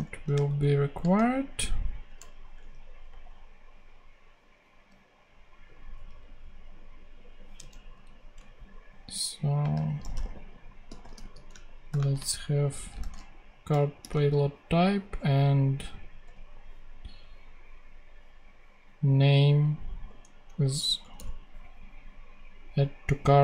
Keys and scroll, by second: 0.5 alt+shift+Up, 3.0 ctrl+super+Tab, 7.6 super+Left, 8.3 alt+super+Left, 9.5-13.9 typing, 13.6 Return, 16.1 BackSpace, 20.4 Right, 20.9 BackSpace.